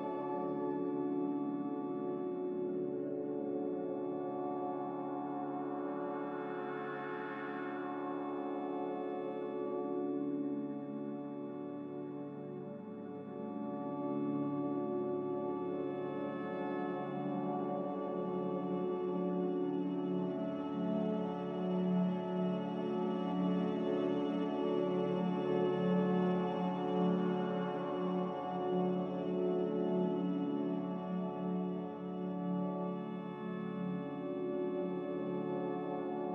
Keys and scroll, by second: 7.7 a, 8.9 5, 10.0 1.